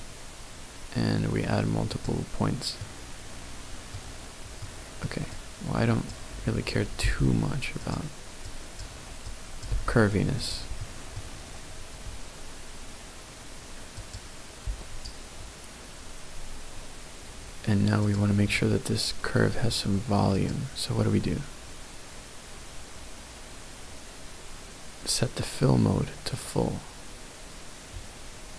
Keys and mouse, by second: 2.7-3.9 middle drag, 4.6 middle click, 5.3 click, 7.0 g, 7.8 click, 8.5 click, 9.2 click, 9.7 g, 10.4 click, 10.8 middle click.